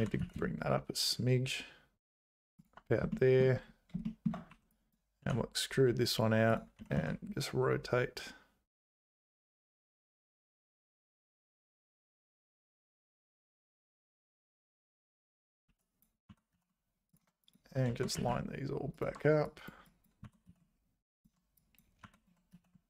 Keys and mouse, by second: 3.1 shift+middle click, 4.2 shift+click, 4.5 1, 4.7 click, 5.2 e, 6.8 r, 15.7 1, 15.9 click, 16.3 g, 17.9 g, 19.4 click, 20.0 click, 20.2 g, 21.6 click, 22.0 g.